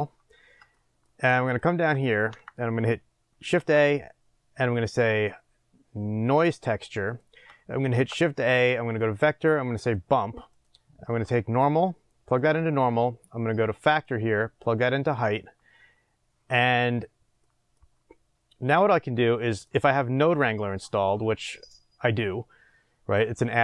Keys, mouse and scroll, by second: 8.4 shift+a, 12.5 click, 17.6-23.6 middle drag.